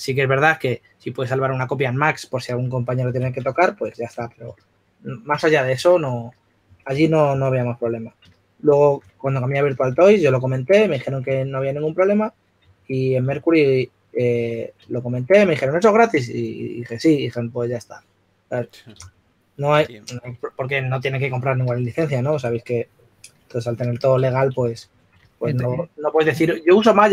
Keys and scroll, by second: 3.4-4.1 typing, 7.1-7.9 typing, 10.3 4, 13.7-14.5 typing, 24.9 shift+f, 25.9 s.